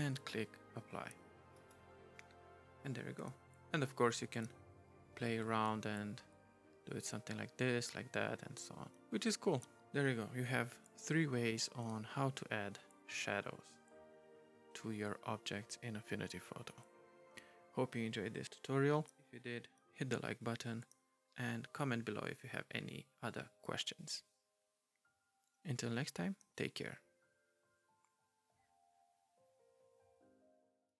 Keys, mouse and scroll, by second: 1.5 right click, 4.2 right click.